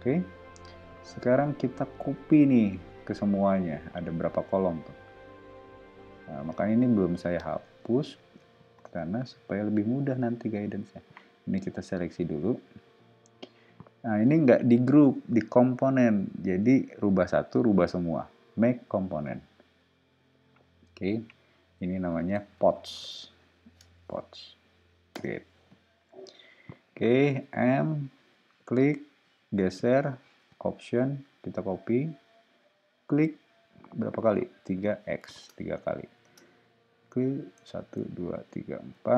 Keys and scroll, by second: 8.8 space, 21.8-23.8 typing, 25.1 Return, 27.4 m, 34.6 3, 35.1 x, 35.4 Return, 36.2 space.